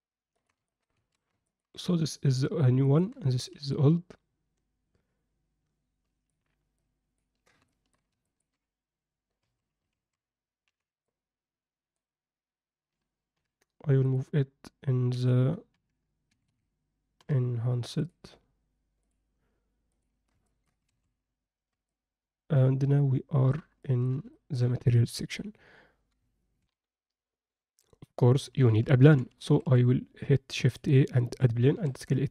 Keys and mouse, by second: 0.6 ctrl+middle drag, 1.3 ctrl+alt+a, 1.4 ctrl+middle drag, 2.8 ctrl+middle drag, 3.7-6.3 ctrl+alt+middle drag, 6.8 ctrl+middle click, 7.7 alt+shift+middle click, 8.2 ctrl+middle click, 9.4 a, 10.0 alt+a, 10.6 b, 13.3 m, 17.2 Escape, 17.2 m, 19.0 click, 19.9 click, 20.4 ctrl+middle click, 20.9 alt+a, 21.9-23.5 alt+middle drag, 23.8 alt+shift+middle click, 24.3 ctrl+middle click, 26.6 ctrl+F9, 26.8 ctrl+F10, 29.0 shift+c, 29.4 shift+a, 31.8 s.